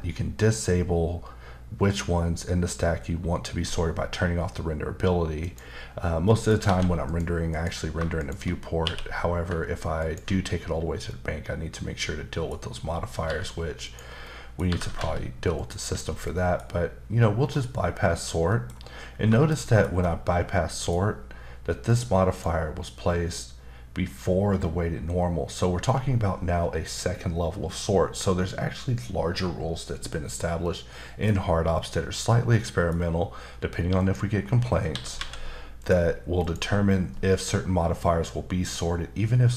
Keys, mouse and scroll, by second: 5.4 click, 5.9-6.2 scroll down 1, 6.2 middle click, 6.6 alt+a, 7.1 click, 7.5 click, 8.2 shift+click, 8.8 q, 10.0 ctrl+click, 10.8 scroll down 1, 11.1 middle click, 12.8-13.2 scroll up 1, 13.2 g, 13.8 click, 14.2 middle click, 14.7 typing, 15.6 click, 16.0 scroll down 2, 16.3 middle click, 17.4-18.5 scroll down 2, 18.5 middle click, 18.7-19.3 scroll up 2, 19.3 shift+middle click, 19.9-20.7 scroll up 1, 20.7 middle click, 21.9 click, 22.3 click, 30.6 middle click, 31.7 middle click, 34.0 click, 34.9 typing, 35.8 click, 36.4 click.